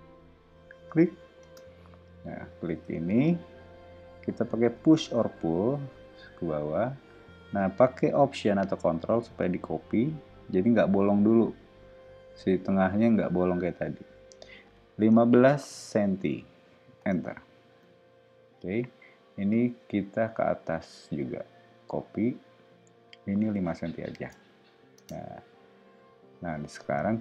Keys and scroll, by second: 1.4 space, 2.8 o, 4.7 p, 15.1 1, 15.6 5, 17.0 Return, 17.7 space, 19.5 p, 23.7 5, 24.2 Return, 24.9 space.